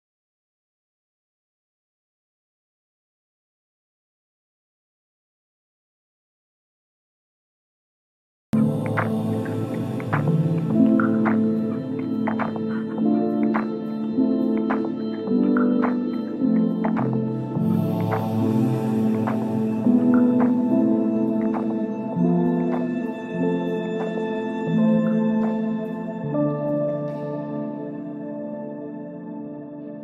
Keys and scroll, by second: 6.6 F3, 7.7 Escape, 8.4 shift+F2, 8.7 F3, 13.5 F3, 14.3 Escape, 14.6 F3, 15.1 Escape, 20.8 ctrl+z, 23.7 shift+F2, 24.1 Escape, 25.2 F9.